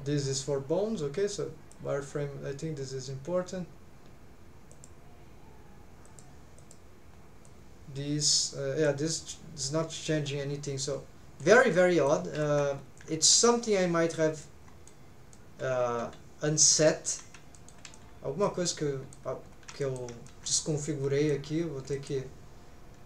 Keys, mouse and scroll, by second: 11.7 middle click, 12.4 alt+z, 12.7-13.0 scroll up 2, 13.1 alt+z, 13.8 scroll down 2, 14.3 scroll up 1, 14.4 middle click, 15.3 scroll up 1, 15.3-16.9 middle drag, 17.0 scroll down 1, 17.5 shift+middle click, 17.9 middle click, 18.7 middle click, 19.4 scroll up 2, 19.8 shift+middle click, 20.3-21.4 middle drag, 21.6 scroll down 1, 21.9 middle click.